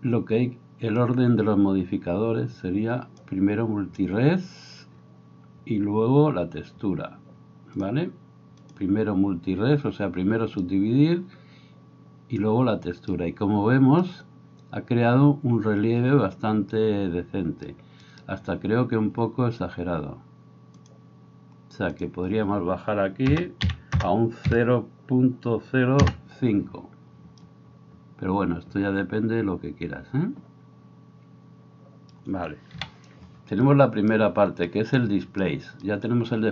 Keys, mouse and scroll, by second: 1.0-3.4 drag, 3.4-7.8 middle drag, 7.8-36.5 drag, 18.0 middle click, 18.0 right click, 32.8 KP_7.